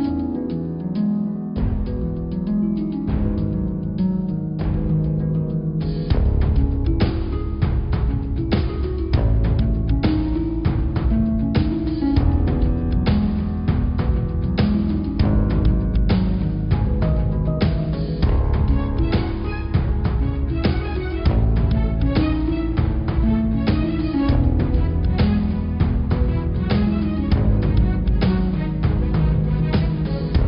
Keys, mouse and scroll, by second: 0.6-1.6 drag, 2.0 click, 2.4 scroll up 4, 3.6 click, 4.7 shift+g, 7.4 click, 8.1 click, 9.5 click, 10.1 r, 11.3 g, 12.6 click, 13.0 shift+click, 13.8 shift+d, 15.6 click, 16.7 g, 18.5 shift+d, 19.9 click, 21.1 g, 22.7 click, 23.5 click, 24.3 s, 26.3 click, 26.6 d, 28.0 g, 28.8 click, 29.6 click, 30.1 g.